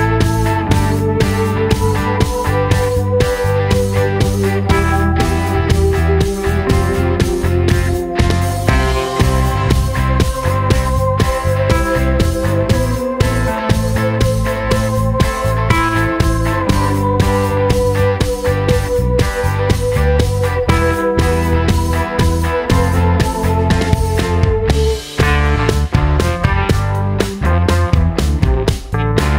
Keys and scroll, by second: 8.7 d.